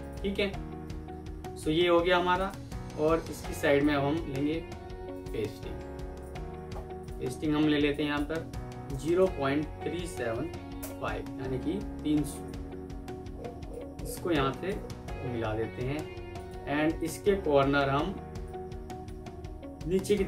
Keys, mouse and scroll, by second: 0.6 F4, 1.8-2.2 alt+scroll down 1, 2.9 alt+scroll down 1, 5.0 right click, 8.8-10.2 typing, 10.7 Return, 17.7 ctrl+q, 19.7 Down.